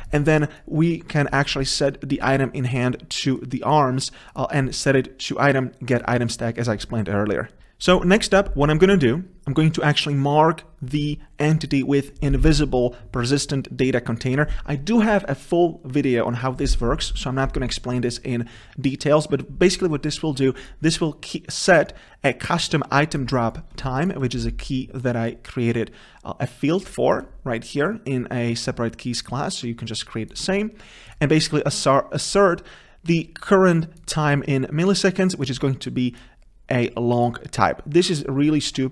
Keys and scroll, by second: 24.2 ctrl+b.